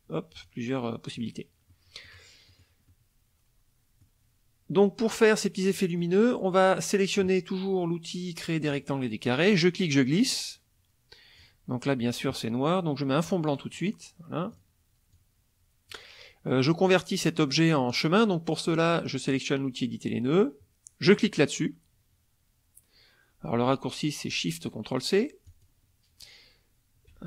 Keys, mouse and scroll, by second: 0.4 click, 1.7 middle click, 2.5 middle click, 2.9-4.2 middle drag, 5.7 middle click, 8.6 click, 9.5-11.5 drag, 13.2 click, 14.5 click, 15.1-16.1 drag, 18.7 click, 25.5 click.